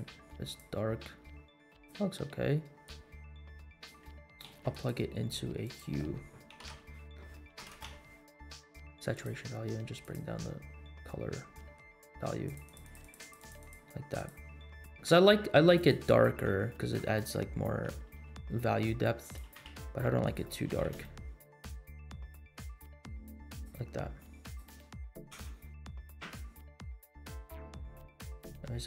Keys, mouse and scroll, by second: 3.0-4.0 drag, 4.4 click, 4.4 shift+a, 7.6 BackSpace, 10.9-11.5 scroll up 3, 11.5 middle click, 12.4-13.9 drag, 14.2 click, 15.7 click, 16.4 scroll up 1, 16.6 shift+middle click, 17.1 scroll up 1, 18.0 r, 19.3 g, 20.6 g, 24.4 click, 25.0 scroll down 1, 25.4 space, 28.3 space.